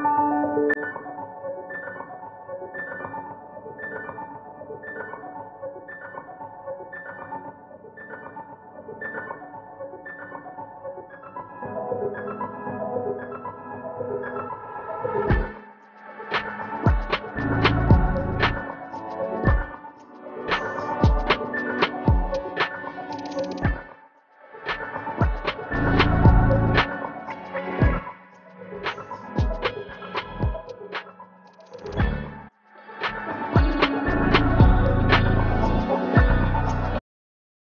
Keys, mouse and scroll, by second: 1.2 ctrl+F2, 1.4 ctrl+F1, 1.8 scroll down 1, 2.0 scroll up 1, 3.4-3.7 scroll down 1, 3.7-4.1 scroll up 1, 4.3-4.6 scroll down 1, 7.7 click, 8.8 scroll down 1, 9.1 right click, 9.9 click, 11.6 click, 12.3 scroll up 1, 12.8 click, 14.2 scroll down 1, 14.5-16.7 right drag, 16.7 click, 19.3 scroll down 1, 19.7 click, 20.0-20.3 scroll down 1, 20.3 scroll up 1, 20.8 click, 21.7-23.0 right drag, 24.5 click, 25.1 scroll up 1, 25.4 click, 25.7-27.4 right drag, 27.7-28.2 scroll up 1, 28.2 right click, 29.2 scroll down 1, 29.4 scroll up 1, 29.7 right click, 30.2 click, 30.5-35.5 right drag, 35.8 click, 36.5 ctrl+h, 36.7 right click, 37.1 click.